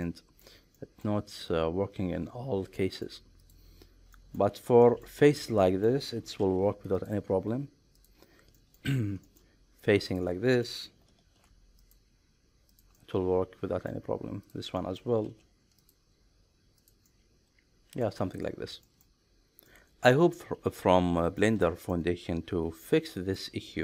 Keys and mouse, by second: 0.0 middle click, 0.7-1.0 shift+middle drag, 1.4-3.0 middle drag, 3.4 click, 4.1 middle click, 4.8 middle click, 5.2 shift+middle click, 5.6 middle click, 6.4 alt+e, 7.9 click, 8.5 middle click, 9.2 shift+middle click, 10.6 middle click, 11.2 alt+e, 12.7 click, 12.9 middle click, 14.4 click, 14.8 middle click, 15.2 alt+e, 16.8 click, 17.0 middle click, 18.8 shift+middle click, 19.7 middle click, 21.4 shift+middle click, 21.9-23.4 middle drag.